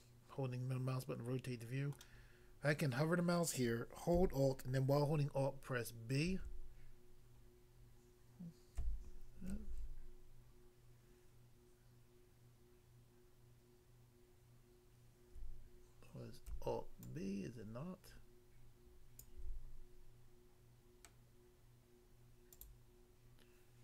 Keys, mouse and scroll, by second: 2.0 middle click, 6.3 alt+b, 16.4 alt+b.